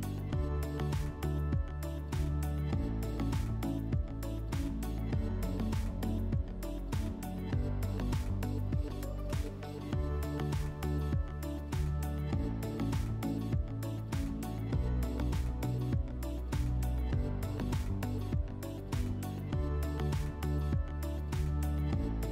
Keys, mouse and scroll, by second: 4.4 click, 4.6 click, 5.5-6.3 typing, 6.8 Return, 11.5-13.5 drag, 17.1 click, 18.6 click, 18.8 click, 19.7 0, 20.4 Return.